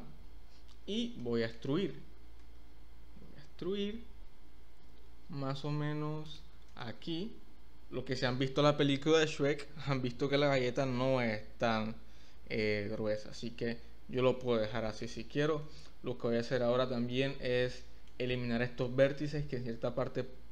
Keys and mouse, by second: 1.2 shift+middle click, 2.4 e, 6.3 click, 6.6 Tab, 6.8-8.1 middle drag, 7.2 drag, 7.9 click, 13.4-15.0 middle drag, 15.7-18.1 middle drag, 18.9-20.5 middle drag.